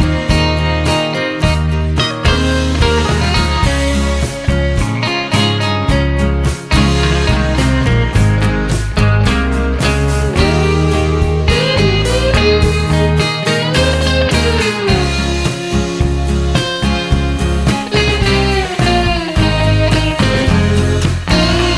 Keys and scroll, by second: 4.7-7.6 typing.